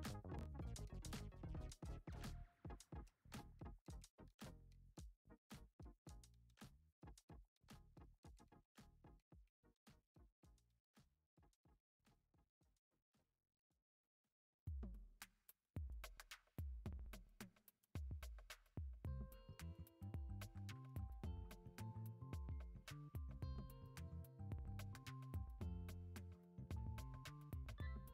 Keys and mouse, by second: 1.4-2.0 shift+middle drag, 2.7 shift+drag, 3.4 shift+drag, 4.1 shift+click, 5.2 shift+click, 5.6-6.0 middle drag, 6.4 shift+middle drag, 6.7 middle drag, 7.1 e, 9.6 e, 11.8 ctrl+z, 12.8 shift+middle click, 14.2 alt+h, 15.7 middle click, 17.6 alt+z, 17.9 c, 19.6 alt+z, 20.2 shift+middle click, 20.8 e, 22.4 ctrl+z, 25.6 click, 26.3 shift+click, 26.8 shift+click.